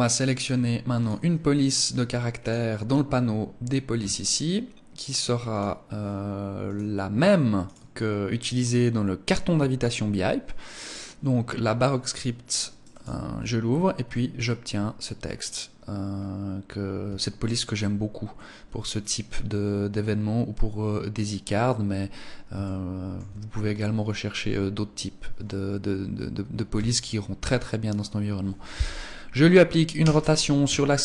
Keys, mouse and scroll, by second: 1.9 click, 5.0 click, 12.5 click, 13.5-13.9 scroll up 2, 15.7 scroll up 1, 16.7 shift+middle click, 22.1 shift+middle click, 26.3 KP_3, 29.5 r.